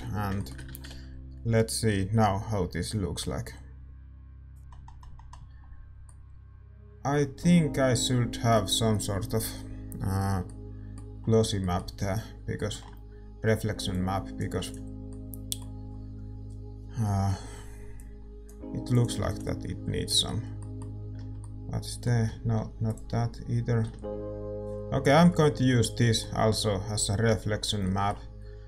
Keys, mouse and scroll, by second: 0.3-4.6 middle drag, 18.9-21.1 drag, 19.8 s, 23.3-24.7 drag, 25.4-27.0 middle drag, 28.4-28.6 middle drag.